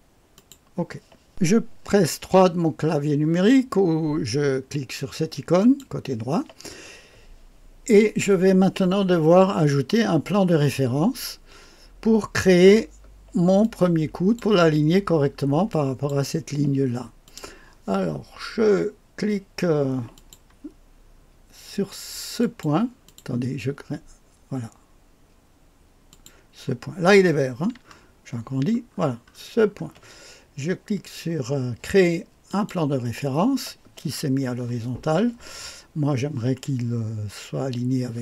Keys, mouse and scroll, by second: 0.4 click, 5.6 click, 13.6 click, 15.7 click, 17.2 click, 20.1 click, 22.4 click, 23.1 click, 26.1 click, 29.2-30.5 alt+scroll down 2, 30.5-32.5 scroll down 1, 32.5 click.